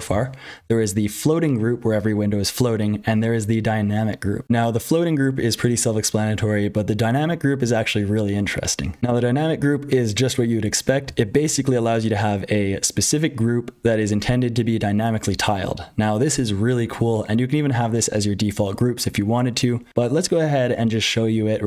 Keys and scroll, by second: 0.0-21.6 typing, 4.4 F12, 9.0 super+h, 9.0 F12.